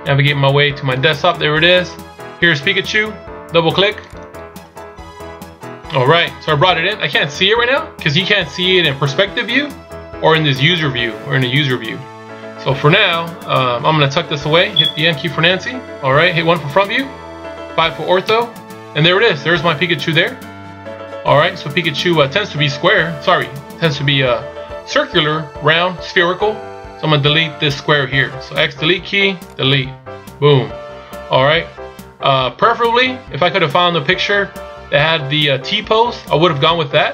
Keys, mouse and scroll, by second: 4.9 click, 7.2 scroll down 2, 7.9 scroll down 2, 8.0 scroll up 3, 13.4-15.6 scroll down 2, 15.6 n, 16.9 KP_1, 18.6 KP_5, 20.0-20.5 scroll down 4.